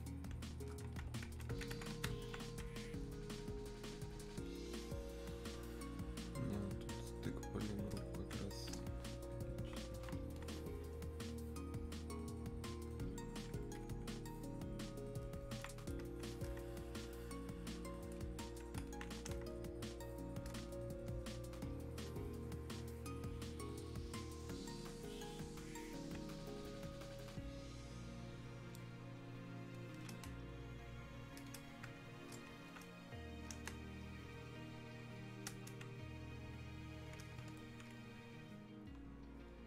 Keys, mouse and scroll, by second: 2.3-10.4 alt+drag, 10.4-14.3 drag, 14.3-15.8 drag, 15.8-18.9 drag, 19.3 space, 20.0 click, 20.1 space, 20.7 click, 29.8 click, 30.3 space, 31.5 click, 32.7 alt+click, 33.7 space, 34.4 click, 34.5 space, 36.7-39.6 drag.